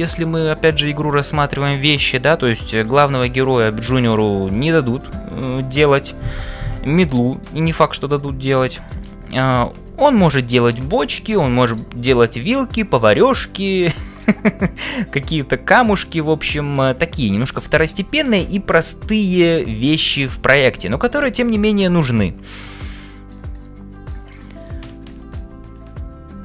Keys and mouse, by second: 7.0 shift+middle click, 8.3 middle click, 23.0 shift+middle click, 23.5 middle click, 24.6 click, 25.2 middle click.